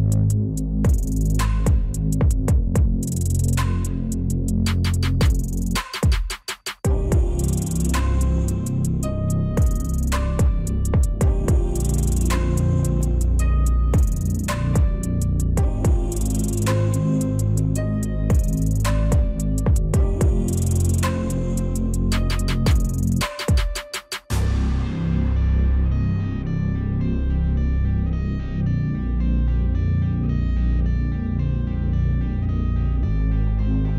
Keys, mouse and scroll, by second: 2.9 scroll down 1, 3.2 alt+click, 5.0 u, 5.7 scroll down 1, 6.6 u, 6.6 scroll down 1, 7.1 u, 7.6 right click, 8.6 middle click, 8.7 scroll down 1, 9.5 double click, 12.0 double click, 13.5 right click, 24.7 alt+click, 24.8 scroll up 1, 24.9 alt+click, 25.3 alt+middle click, 25.4 scroll down 1, 25.5 alt+click, 27.7 double click, 28.1 scroll up 1, 28.2 alt+click, 28.4 alt+middle click, 28.5 alt+click, 28.9 scroll down 1, 29.1 alt+click, 29.4 scroll up 1, 30.1-30.5 scroll down 1, 30.5 right click, 30.8 scroll down 1, 31.4-31.8 scroll up 1, 31.8 right click, 32.1 scroll up 1, 32.2 alt+click, 32.7 alt+middle click, 33.9 scroll up 1.